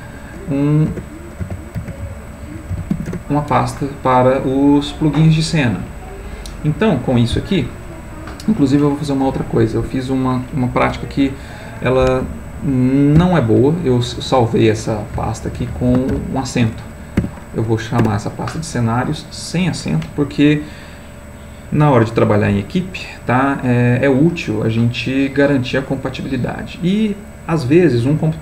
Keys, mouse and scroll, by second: 0.9-2.9 typing, 3.1 Return, 4.3 click, 6.9 click, 13.2 F2, 15.1 Right, 15.4 Left, 17.2 a, 18.0 Return.